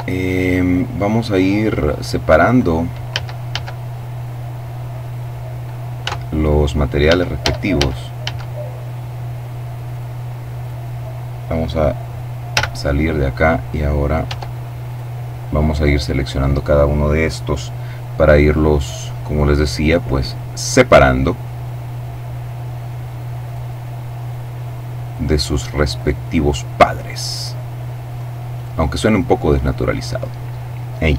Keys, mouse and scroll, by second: 1.0 click, 2.2 right click, 2.8 a, 4.7 click, 5.8 Tab, 9.6 right click, 10.2 right click, 12.2 z, 13.9 Tab, 14.5 right click, 15.4 right click, 18.0 click, 18.9 right click, 19.9 click, 20.6 right click, 21.4 click, 23.0 right click, 23.9 click, 24.7 right click, 25.5 right click, 26.7 click, 27.1 middle click, 28.1 right click, 29.1 click.